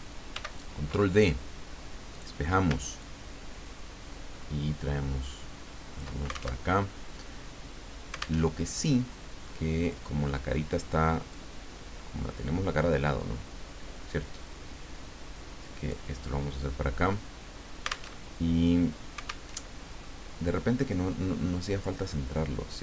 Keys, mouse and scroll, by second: 0.3 ctrl+d, 2.1 click, 3.0-6.2 ctrl+drag, 6.6 ctrl+alt+Tab, 8.4 alt+Tab, 9.8 click, 11.3-16.2 drag, 18.1 alt+Tab, 19.5 alt+Tab, 20.9-22.1 drag.